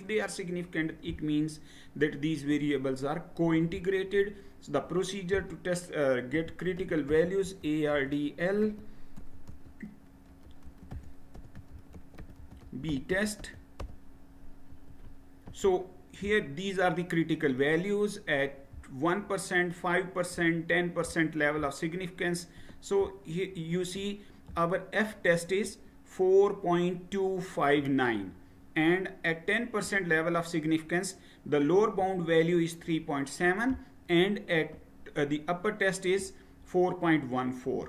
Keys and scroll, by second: 6.2-14.3 typing, 14.7 Return.